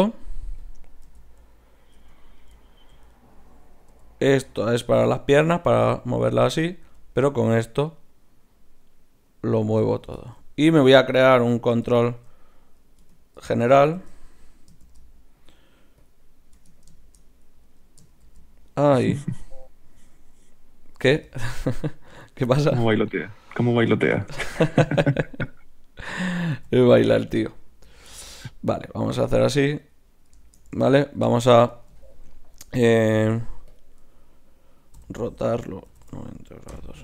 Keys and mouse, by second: 1.1 z, 1.9 Tab, 3.1-5.1 drag, 3.9 g, 5.3 r, 6.6-8.2 right drag, 6.8 g, 10.2-11.3 middle drag, 11.2 Tab, 11.8 Tab, 13.0 Tab, 13.9 shift+a, 14.8 shift+s, 16.7 Tab, 18.2 shift+a, 21.2 g, 22.8-24.7 right drag, 24.1 KP_1, 25.5-27.3 drag, 26.6 z, 28.2 ctrl+alt+s, 29.1-30.1 drag, 29.1-30.1 right drag, 33.1 ., 34.4 click, 34.4 right click, 35.0 r.